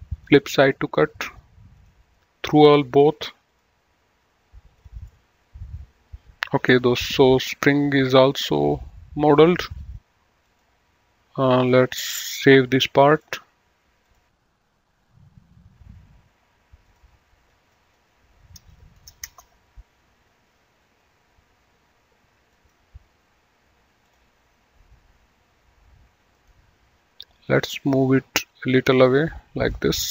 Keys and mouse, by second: 0.5 click, 2.1 click, 5.0 click, 5.4 middle click, 8.3 middle click, 10.6 click, 13.4 click, 15.7 click, 17.2 click, 19.3 BackSpace, 19.6 Return, 22.8 click, 24.4 click, 26.7 right click, 27.7 click, 29.1 click.